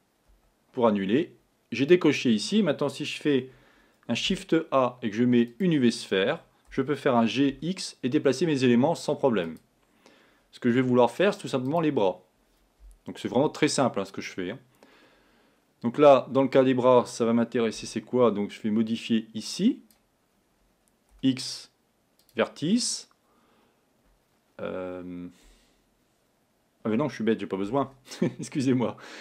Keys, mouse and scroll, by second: 0.4 z, 4.3 shift+a, 6.8 g, 10.9 z, 13.4 a, 17.8 b, 21.2 x, 27.9 z.